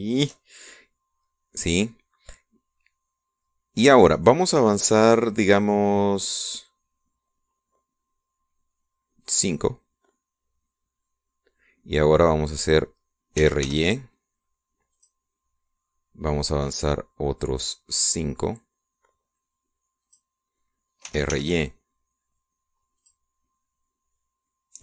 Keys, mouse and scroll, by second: 0.8 shift+click, 10.0 click, 14.2 r, 14.5 y, 15.8 click, 20.9 click, 21.9 r, 22.1 y, 23.8 click.